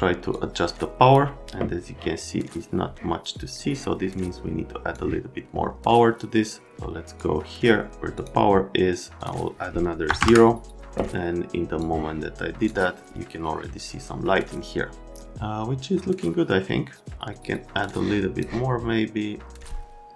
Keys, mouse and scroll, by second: 0.3 click, 3.6 click, 6.7 click, 8.1 click, 9.2 click, 10.1 KP_0, 10.2 KP_Enter, 11.8 click, 17.9 click.